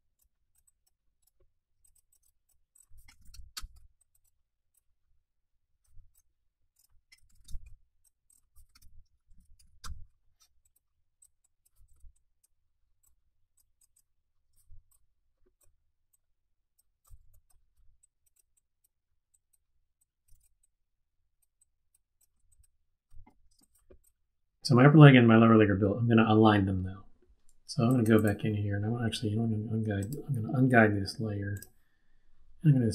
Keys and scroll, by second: 2.8-3.6 typing, 6.9-9.8 typing, 11.9 super+z, 16.8-17.8 typing, 20.2 super+z, 22.3 z, 23.2 super+-, 23.5 space.